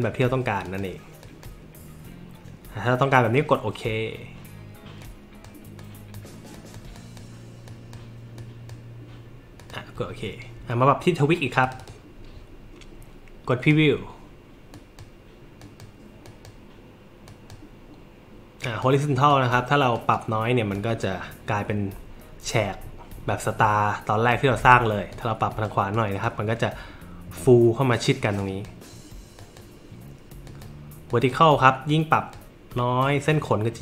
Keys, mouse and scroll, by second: 0.0 click, 0.6 click, 1.2 click, 5.0 click, 5.8 click, 6.5 click, 6.9 click, 7.6 click, 8.4 click, 9.6 click, 11.6 click, 11.8 click, 13.6 click, 14.7 click, 15.6 click, 16.3 click, 17.3 click, 18.6 click, 19.3 click, 19.9 click, 20.7 drag, 25.1 click, 25.9 click, 28.4 click, 29.4 click, 30.5 click, 31.1 click, 31.9 click, 33.0 click.